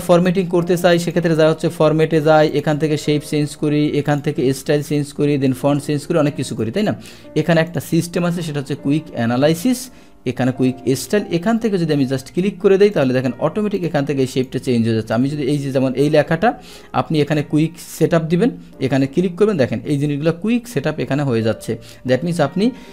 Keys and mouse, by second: 1.0 click, 2.5 click, 4.1 click, 6.5 click, 7.7 click, 9.7 click, 12.9 click, 13.8 click, 14.3 click, 15.1 click, 17.2 click.